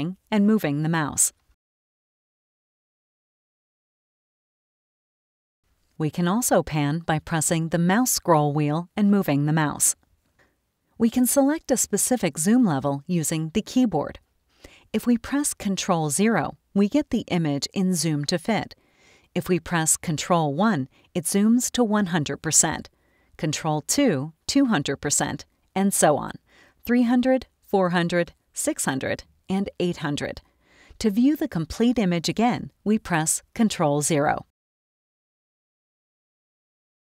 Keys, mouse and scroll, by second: 0.7-5.6 drag, 7.8-10.5 drag, 16.1 ctrl+0, 20.6 ctrl+1, 23.9 ctrl+2, 26.7 ctrl+3, 27.5 ctrl+4, 28.6 ctrl+6, 29.7 ctrl+8, 34.0 ctrl+0.